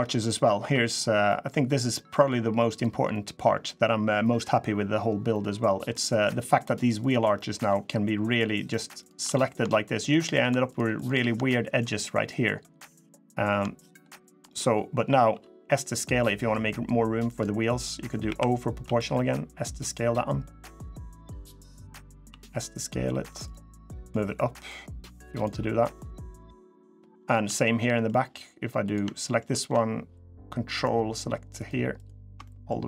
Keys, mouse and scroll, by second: 0.0 middle click, 0.2 scroll up 1, 0.3 2, 0.7-1.4 scroll down 2, 1.0 middle click, 1.5 scroll up 1, 1.5 middle click, 2.5 click, 2.9 middle click, 4.5 scroll up 2, 5.1 middle click, 5.3 scroll down 1, 5.7 middle click, 6.7 click, 7.1 middle click, 8.0 shift+click, 8.7 click, 9.0 middle click, 9.8 shift+click, 10.4 shift+click, 10.7 shift+click, 11.2 shift+middle click, 13.0 middle click, 13.6 shift+click, 13.9 shift+click, 14.2 middle click, 15.0 s, 18.0 o, 18.6 s, 21.3 middle click, 22.0 s, 23.8 click, 25.4 middle click, 26.7 scroll down 2, 27.1 shift+middle click, 27.4 middle click, 28.6 click, 28.9 shift+middle click, 30.5 ctrl+click, 31.3 click, 31.7 ctrl+click, 32.2 middle click, 32.4 scroll up 1.